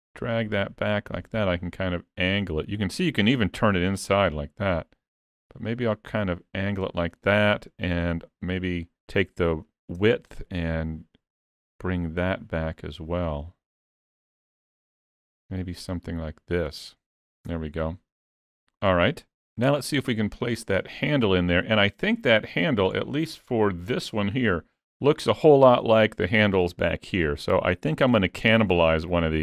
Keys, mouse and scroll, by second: 10.3 shift+click, 17.5 Tab, 17.8 scroll down 3, 18.2 middle click, 21.3-22.3 scroll down 1, 23.0 shift+middle click, 23.6-24.1 scroll up 2, 23.8 shift+middle click, 26.6 click, 27.3 middle click, 28.4 shift+middle click, 28.9 middle click.